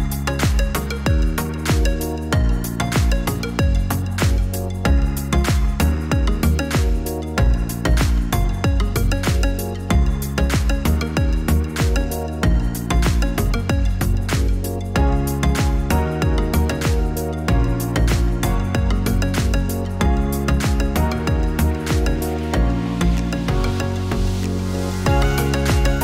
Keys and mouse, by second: 0.7 click, 7.3 click, 8.9-22.5 drag.